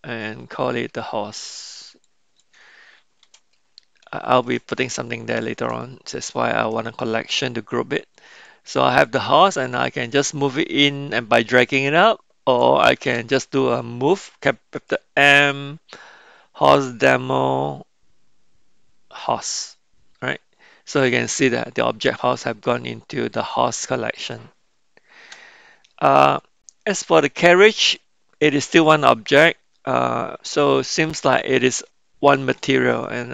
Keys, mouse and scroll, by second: 8.1 click, 9.0-12.7 drag, 14.7 m, 24.2 click, 26.3 click, 27.2-32.4 middle drag.